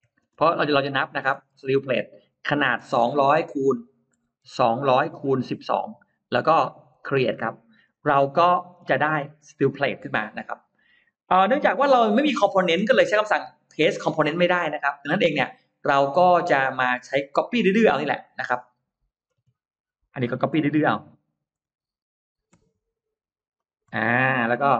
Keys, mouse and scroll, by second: 0.0-6.3 typing, 6.8 Return, 7.6 Return, 7.7 scroll up 1, 7.9-8.9 scroll down 3, 9.1 scroll up 1, 9.3 scroll down 1, 11.1 click, 11.5-11.8 scroll up 1, 13.6-14.4 scroll up 2, 14.8 middle click, 15.4 scroll down 1, 16.3 click, 17.2 middle click, 17.6-18.0 scroll down 1, 18.3 scroll up 1, 19.4 m, 20.0 click, 23.4 shift+click, 23.9-24.2 scroll down 1, 24.4 middle click.